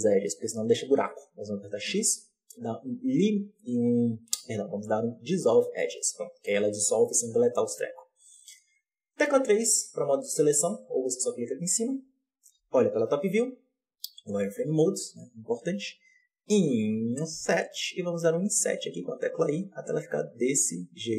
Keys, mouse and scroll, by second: 0.8 ctrl+z, 1.8 x, 5.7-7.6 middle drag, 7.6-8.6 scroll up 1, 8.6-9.2 scroll up 1, 9.2 3, 9.8 right click, 12.5 KP_7, 12.8 z, 13.7-14.5 scroll up 3, 14.5-15.5 scroll up 1, 15.5-16.3 scroll up 1.